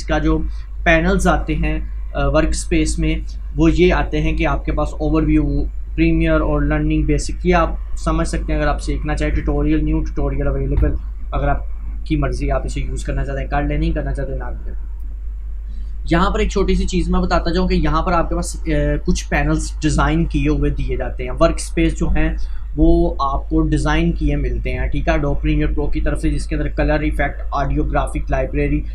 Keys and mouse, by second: 16.2-20.9 drag.